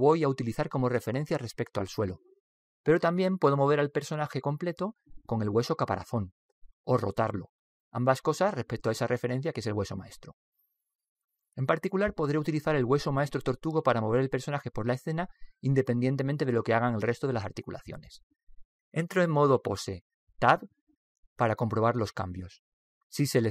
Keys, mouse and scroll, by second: 2.5 right click, 4.6 right click, 21.0 Tab.